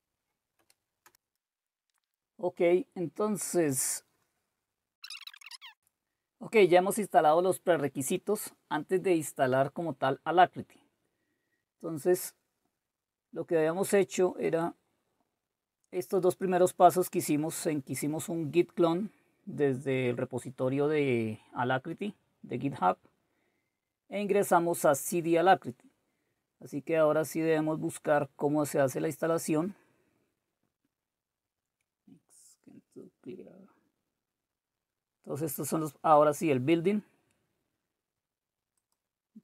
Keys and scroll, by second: 0.6 Return.